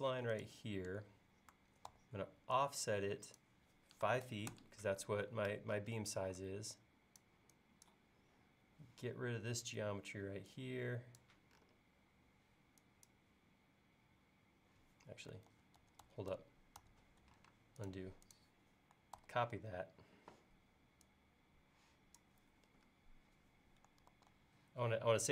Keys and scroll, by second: 1.9 f, 3.9-4.8 typing, 6.3 e, 15.5 super+z, 17.5 space, 19.2 super+c, 24.1 super+v.